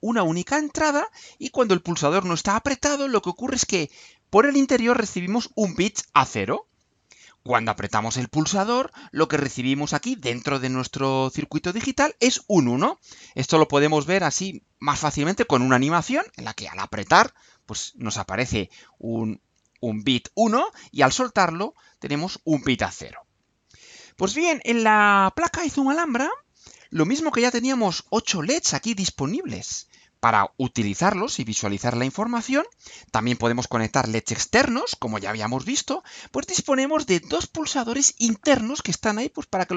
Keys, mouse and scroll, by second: 6.9-7.8 scroll down 4, 12.9-13.3 scroll down 2, 13.8 scroll down 2, 24.1-24.5 scroll down 2, 25.3-26.0 scroll down 2.